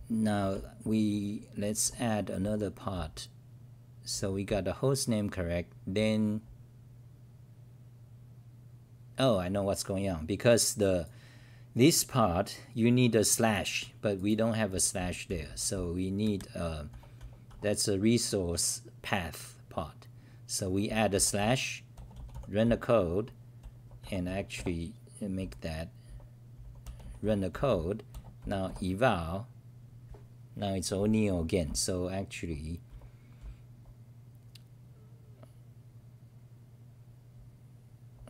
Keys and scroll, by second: 0.0-4.5 typing, 5.5 n, 14.1-16.9 typing, 17.5 Home, 20.6-27.5 typing, 31.6-35.5 typing, 37.3-37.7 n.